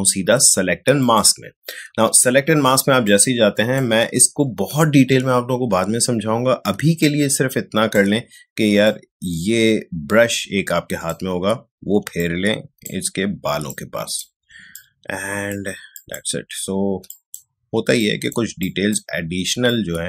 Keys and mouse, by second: 1.0 click, 2.8 space, 3.0 click, 3.3 space, 6.7 ctrl+space, 7.0 ctrl+click, 7.2 ctrl+space, 8.8-12.0 drag, 12.0 space, 12.1 click, 12.5 space, 13.7 click, 14.5 space, 14.7 click, 15.0 space, 15.9 click, 16.7 space, 17.1 click, 17.3 space, 17.9 click, 18.1 space, 18.6 click, 18.7 space, 19.7-20.0 drag.